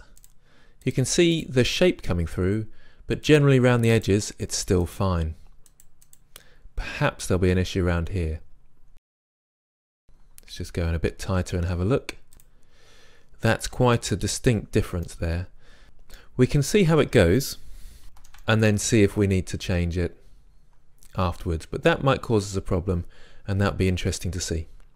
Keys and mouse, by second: 1.3-7.8 drag, 9.5-12.3 middle drag, 12.3-14.3 drag, 14.3-15.1 middle drag, 18.0 Tab, 19.4 Tab, 23.5-24.8 middle drag.